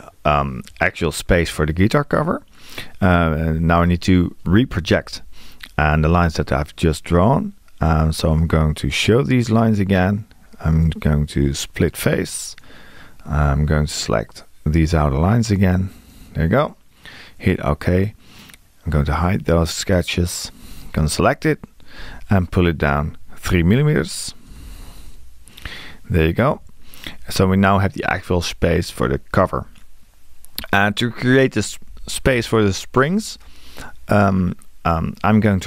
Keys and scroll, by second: 22.0 q, 24.5 space.